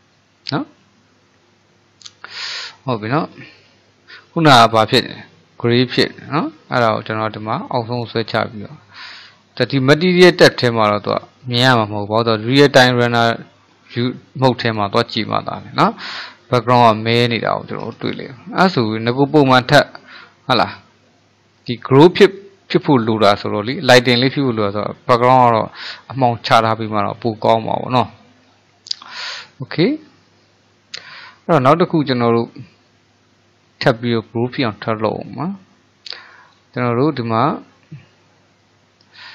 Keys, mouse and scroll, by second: 3.4 ctrl+z, 6.7 click, 11.1 click, 12.8 click, 14.8-19.0 middle drag, 19.0 click, 19.4-26.0 middle drag, 26.1-35.9 middle drag, 36.5 click, 39.2 click.